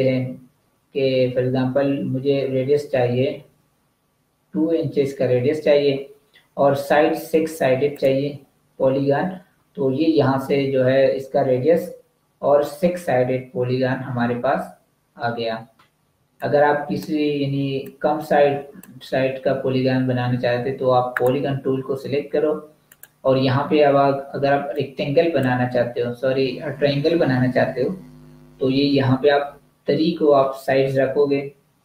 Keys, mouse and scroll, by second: 4.5 2, 7.7 2, 7.9 click, 16.0 v, 16.4 click, 21.0 click, 29.2 3.